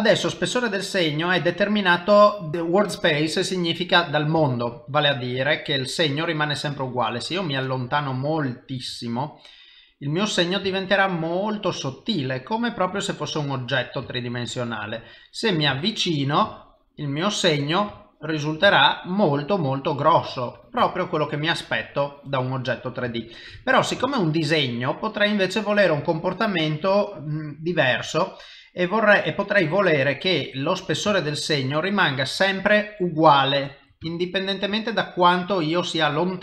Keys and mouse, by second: 4.9 ctrl+middle click, 6.6 ctrl+middle click, 7.4 ctrl+middle click, 9.0 middle click, 10.9 ctrl+middle click, 11.7 middle click, 14.4 ctrl+middle click, 15.2 ctrl+middle click, 15.8 shift+middle click, 16.6 ctrl+middle click, 18.0 shift+middle click, 18.4 shift+middle click, 18.7 ctrl+middle click, 21.0 ctrl+middle click, 22.1 ctrl+middle click, 22.7 ctrl+middle click, 23.1 shift+middle click, 23.7 ctrl+middle click, 24.1 shift+middle click, 24.5 middle click, 28.1 click, 31.2 ctrl+middle click, 32.7 ctrl+middle click, 33.5 ctrl+middle click, 34.1 shift+middle click, 34.2 shift+middle click, 34.8 middle click, 36.3 middle click.